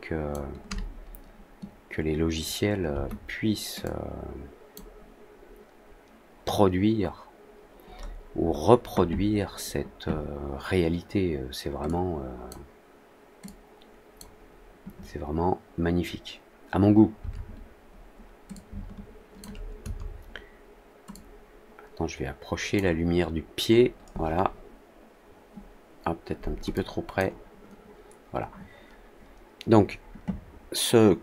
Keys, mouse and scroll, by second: 3.7 click, 8.0 middle click, 8.3 middle click, 11.8-12.4 drag, 13.4-14.1 drag, 18.4-19.3 shift+drag, 21.0-22.7 drag, 26.7 click.